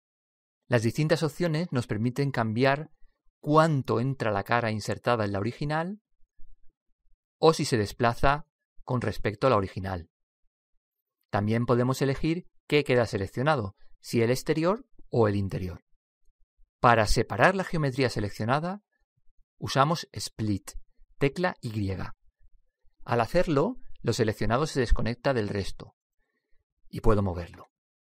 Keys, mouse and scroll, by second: 0.7-2.5 middle drag, 2.5 click, 7.3 click, 13.2 click, 15.2 click, 22.2 y, 26.8 click.